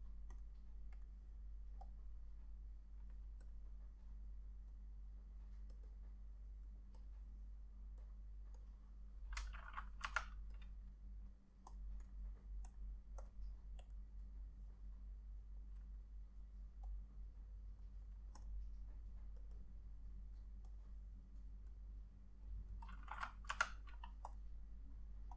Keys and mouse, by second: 6.0 double click, 10.2 F6, 12.1 double click, 19.7 double click, 23.6 click, 23.9 F6.